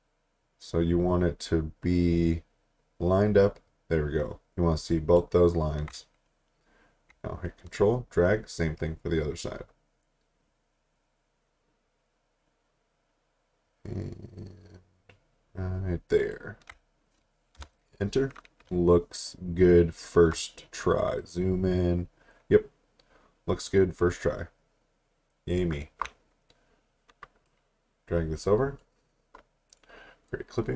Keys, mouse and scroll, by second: 7.4 ctrl+click, 17.6 Return, 20.3 alt+Num_Lock, 20.6 alt+scroll up 1, 22.7 scroll down 1, 23.3-23.8 alt+scroll down 3, 24.3 alt+scroll down 1, 25.1 alt+scroll down 1, 27.5 click, 29.7 right click.